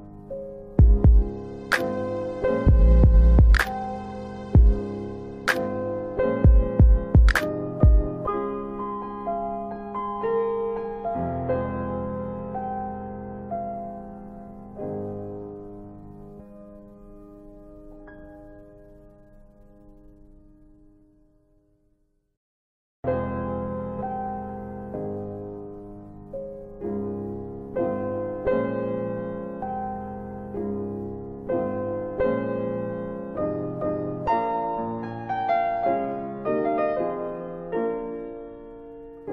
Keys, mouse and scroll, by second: 0.6 alt+middle click, 1.8 click, 3.3 alt+middle click, 3.5 alt+w, 4.0 alt+w, 4.4 middle click, 4.5 click, 7.8 click, 8.6 ctrl+z, 10.7 click, 13.4 click, 14.1 middle click, 16.2 1, 16.8 click, 18.8 ctrl+z, 19.5 click, 21.6 space, 23.5 middle click, 23.5-24.2 scroll down 2, 24.2 middle click, 24.4-24.9 scroll up 1, 24.9 middle click, 26.2 scroll up 1, 26.7 scroll, 33.1 click, 35.8 click.